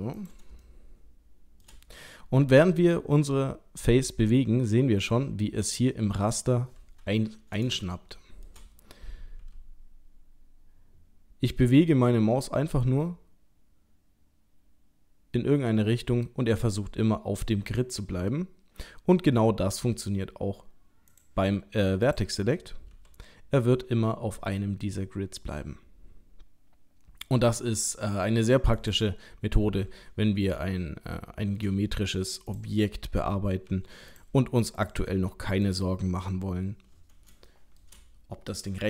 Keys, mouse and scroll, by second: 0.7 shift+middle click, 2.7 g, 6.9-7.7 scroll up 3, 7.7 scroll up 1, 7.9 shift+middle click, 9.4 g, 18.2-19.2 scroll down 3, 19.5-20.0 scroll up 2, 21.1 click, 22.1 click, 22.9 g, 29.2-29.9 scroll down 2, 29.9-30.4 scroll down 2, 30.6 shift+middle click, 31.3 shift+middle click, 31.9-32.2 scroll up 1, 32.5 click, 33.7 g, 34.8 click, 35.1 g, 36.1 scroll down 1, 36.7-37.3 scroll down 3, 37.5 shift+middle click.